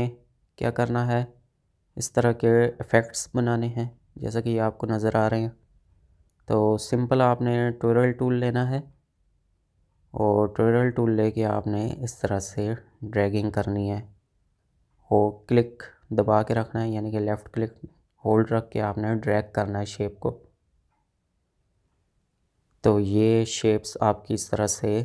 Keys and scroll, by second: 1.4 space, 22.5 space.